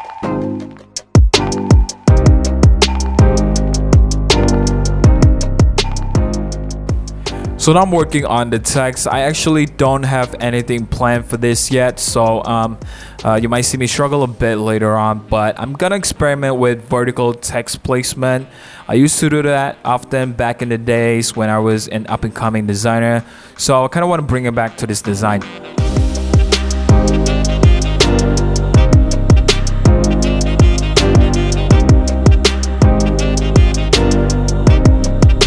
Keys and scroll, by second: 0.3-1.9 typing, 0.5 super+z, 2.8 super+c, 3.0 typing, 4.2 t, 4.6 super+v, 11.6 super+z, 26.7 Tab, 26.8 shift+Page_Down, 26.9 BackSpace, 27.2 super+c, 27.5 super+v, 28.1-30.2 typing, 29.4 super+-, 29.6 super+0, 31.8 super+c, 32.3 v, 32.4 super+a, 32.4 super+c, 32.5 super+d, 33.5 super+z, 33.9 super+t, 35.4 super+-.